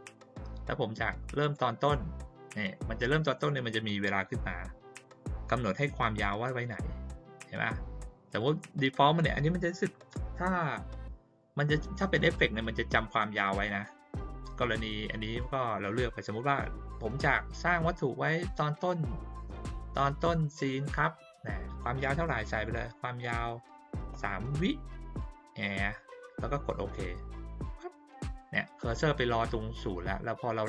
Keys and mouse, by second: 1.4 click, 8.2 click, 22.2 click, 27.6 click.